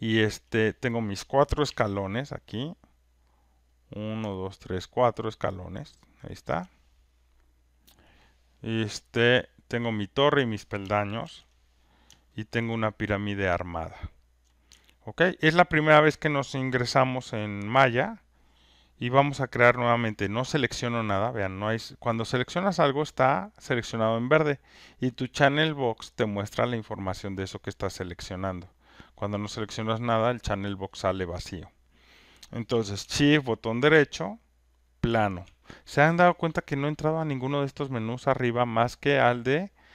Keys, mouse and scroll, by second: 0.3 alt+right click, 1.7 ctrl+F1, 2.7 click, 6.5 ctrl+click, 11.2 ctrl+F1, 13.4 alt+click, 14.3 alt+right click, 15.2 alt+click, 22.6 click, 23.5 click, 24.4 click, 27.9 click, 35.3 shift+right click, 37.9-39.9 shift+right drag.